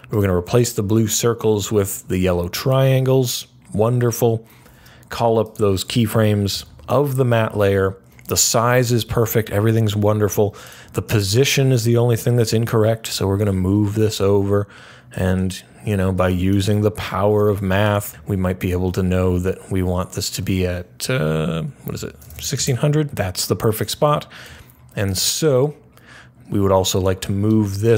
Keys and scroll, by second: 1.5 super+d, 6.4 u, 15.0 F9, 21.6-22.8 typing.